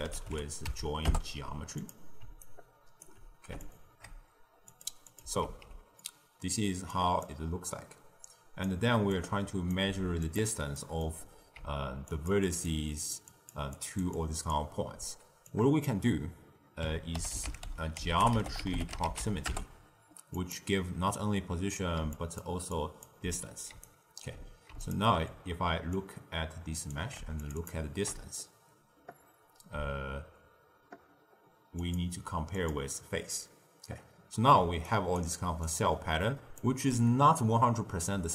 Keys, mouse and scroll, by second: 2.3-3.6 alt+right drag, 3.6 alt+shift+click, 4.6 click, 5.0 click, 5.4 ctrl+x, 5.9-6.8 middle drag, 6.8 click, 7.6 click, 9.0 click, 9.7 g, 10.7 middle click, 11.5-14.8 typing, 12.0 click, 12.4 click, 12.8 click, 13.2 click, 13.7 click, 14.1 click, 15.4 drag, 22.0-24.2 typing, 22.1-22.5 drag, 22.7 click, 23.7 right click, 24.8 ctrl+shift+click, 25.9 click, 27.4 ctrl+shift+click, 27.5 ctrl+shift+click, 31.7-34.5 ctrl+shift+drag, 34.5 d, 34.8 right click, 35.2 d, 35.6-36.5 drag, 36.5 d.